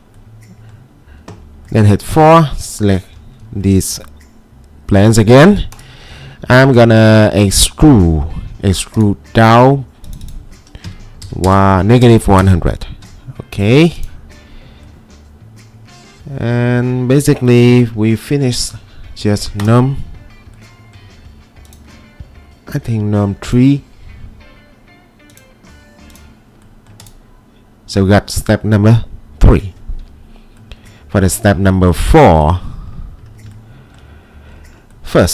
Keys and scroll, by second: 2.1 4, 10.6-12.0 typing, 12.4 Return, 13.4 typing, 14.6-15.4 typing, 17.5 typing.